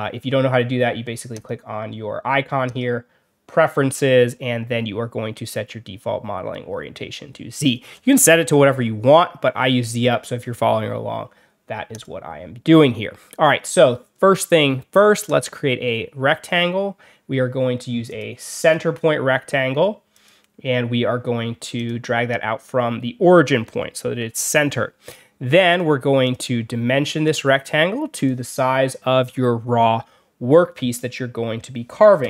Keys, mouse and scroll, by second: 1.2 click, 2.6 click, 11.8 click, 15.2 click, 18.0 click, 18.5 click, 20.0 click, 21.7 click, 24.1 Escape, 25.1 middle click, 25.1 scroll up 1, 25.6 click, 26.1 click, 27.1 click, 28.0 click.